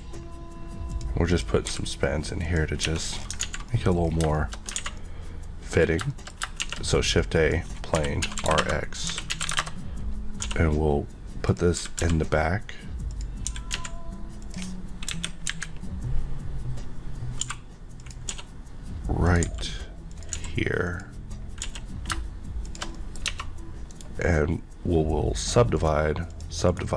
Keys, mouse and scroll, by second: 0.9 click, 1.7 g, 2.4 click, 2.7 scroll, 2.8 scroll down 1, 3.4 alt+z, 3.7 middle click, 4.0 scroll down 1, 4.3 shift+middle click, 4.5 middle click, 4.7 alt+scroll down 1, 4.8 alt+a, 4.9 middle click, 6.0 shift+middle click, 6.6 shift+a, 7.3 click, 8.0-10.4 typing, 8.5 Return, 11.4 click, 11.8 typing, 13.1 click, 14.4 click, 15.0 KP_1, 15.4 KP_3, 17.4 g, 17.9 click, 18.3 s, 19.2 click, 19.4 g, 20.1 click, 20.3 s, 20.8 click, 21.6 s, 22.6 shift+click, 22.9 middle click, 23.2 Tab, 23.8 right click, 25.3 click, 25.7 right click, 26.3 click, 26.7 right click.